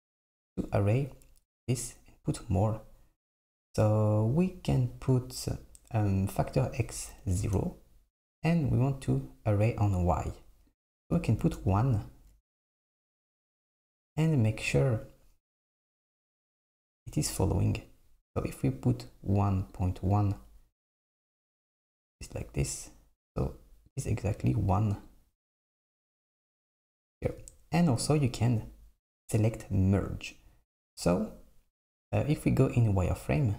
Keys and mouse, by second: 6.7-13.1 drag, 19.8-22.8 drag, 23.4-26.3 drag, 30.3 click, 32.7 click.